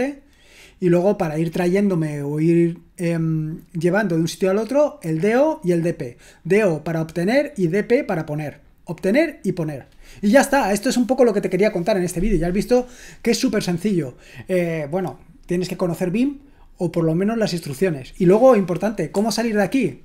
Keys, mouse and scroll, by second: 19.1 Escape.